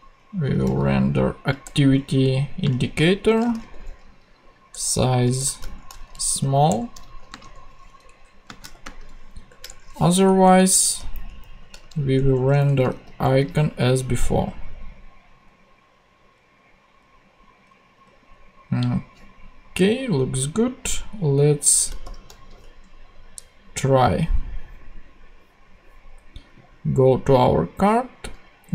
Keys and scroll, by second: 0.4 shift+a, 0.7 shift+c, 1.6 Return, 2.6-4.1 typing, 5.3-7.4 typing, 7.0 super+Right, 7.3 super+space, 8.0 Down, 8.4 space, 8.7 shift+;, 9.3 shift+9, 9.6 shift+Return, 10.2 Down, 10.9 alt+shift+Down, 11.8 alt+shift+super+Up, 11.8 alt+shift+super+Left, 12.1 super+Tab, 12.6 Down, 12.9 super+x, 22.0 shift+super+p, 22.6 shift+super+Tab, 23.3 super+Tab.